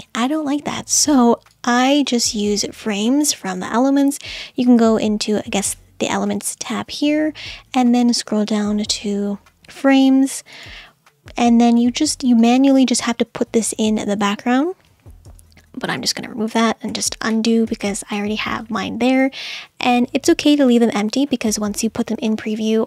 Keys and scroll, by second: 16.2 super+z, 17.3 super+z, 18.1 super+z.